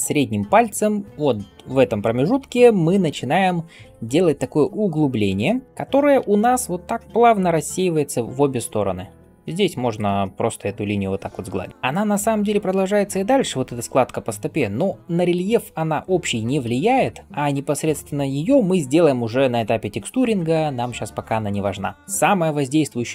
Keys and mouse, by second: 21.6 click, 21.6 right click.